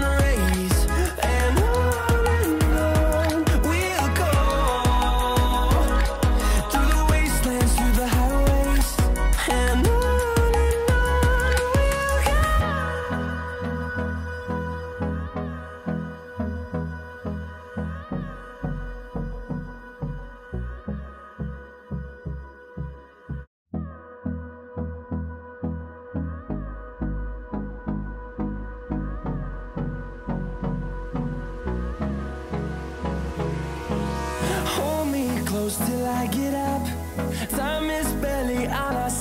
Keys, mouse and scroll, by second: 0.0-0.9 scroll down 1, 0.9 scroll up 1, 4.1 scroll down 1, 11.0 F10, 12.2 scroll up 1, 12.7 click, 18.7-19.7 scroll up 1, 19.7 click, 21.6 scroll down 1, 21.6 typing, 22.7 click, 24.3 Delete, 24.8-25.2 scroll down 1, 25.2 scroll up 1, 25.9 typing, 26.4 click, 27.2 Delete, 28.0 click, 28.4 Delete, 28.6 scroll down 1, 31.7 typing, 33.5 click, 34.9-35.2 scroll up 1, 36.2 click.